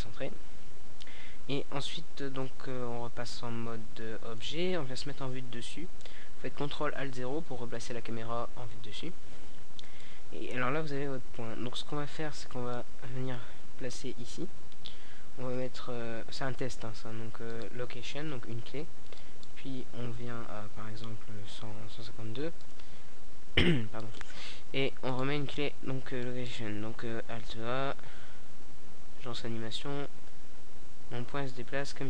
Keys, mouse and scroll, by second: 0.2-1.2 drag, 11.8-13.2 drag, 15.0 i, 18.2-19.7 drag, 19.7 middle click, 21.6-23.4 drag, 23.4 i, 25.0-26.8 drag, 26.4 a, 27.3 alt+a, 31.2 a.